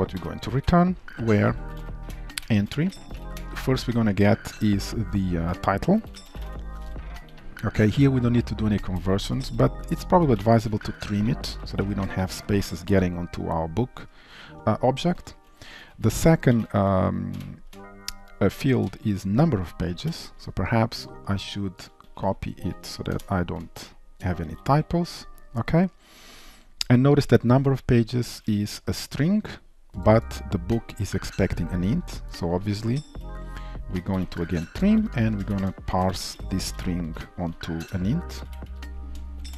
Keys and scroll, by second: 2.2 Return, 10.9 Return, 16.1 Return, 22.1 ctrl+w, 22.7 ctrl+c, 23.8 ctrl+v, 33.2 ctrl+shift+Left, 33.5 ctrl+shift+Right, 34.6 Return, 38.3 Delete.